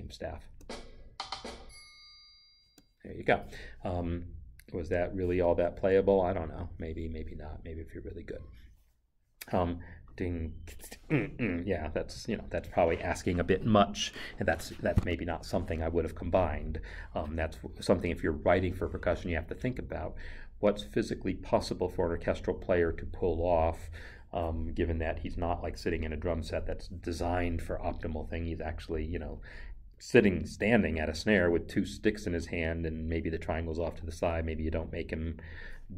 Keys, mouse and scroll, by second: 2.6 space.